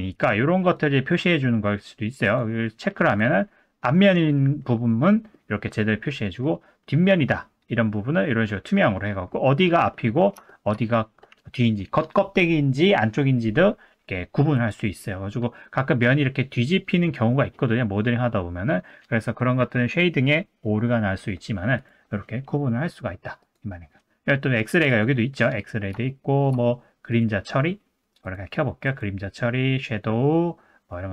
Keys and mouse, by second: 0.8-2.7 drag, 3.1 click, 3.4-4.3 middle drag, 4.9-5.3 middle drag, 5.7-6.4 middle drag, 6.9-8.5 middle drag, 8.9-9.3 middle drag, 10.0 middle drag, 10.5 shift+middle drag, 14.7 click, 17.0 middle drag, 18.0-18.9 middle drag, 21.8-25.8 drag, 26.1 shift+middle drag, 27.2-31.1 drag.